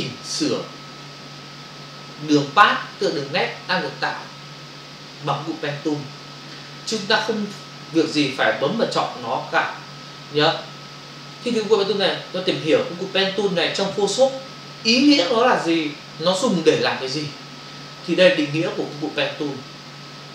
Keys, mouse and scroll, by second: 18.9 click.